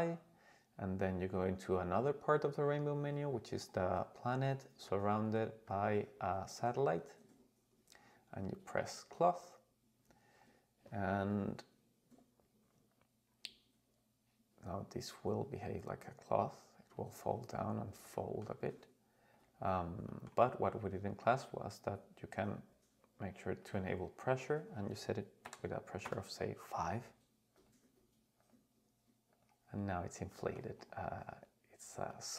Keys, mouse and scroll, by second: 3.0 click, 9.3 click, 12.3-13.3 scroll down 4, 13.3-13.6 scroll down 3, 15.9 click, 16.9 click, 17.6 scroll down 2, 18.0 middle click, 19.3 click, 20.1 middle click, 21.2-22.6 scroll down 4, 22.6-23.6 scroll up 1, 23.6 click, 24.5-26.1 drag, 27.5 click, 28.4 click, 29.5 click, 29.8 scroll up 2, 30.3 middle drag, 30.8 right click, 32.1-32.3 middle drag.